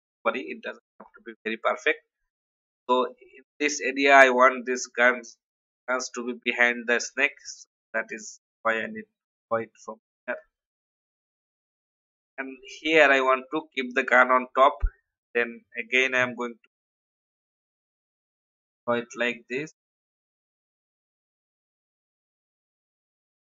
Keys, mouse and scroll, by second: 1.0-1.5 scroll up 1, 2.1 alt+scroll down 1, 3.1 scroll up 1, 5.8-6.3 alt+scroll up 1, 7.9-12.4 drag, 14.6 alt+scroll up 1, 15.9-23.5 drag.